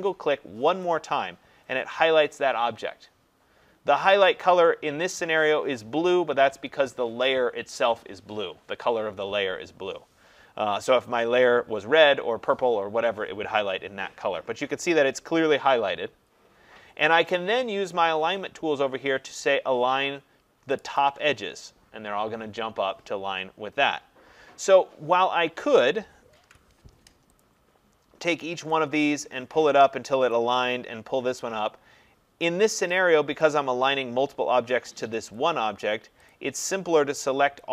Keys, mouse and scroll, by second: 0.8 click, 21.0 click, 26.3 click, 26.4 ctrl+z, 27.4 click, 30.3 click, 33.4 click, 35.4 click, 36.3 click, 37.6 click.